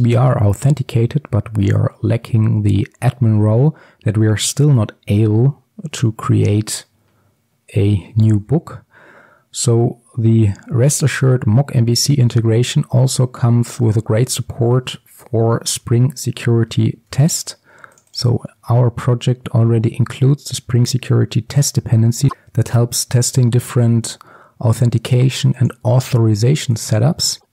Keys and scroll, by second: 16.8 alt+1.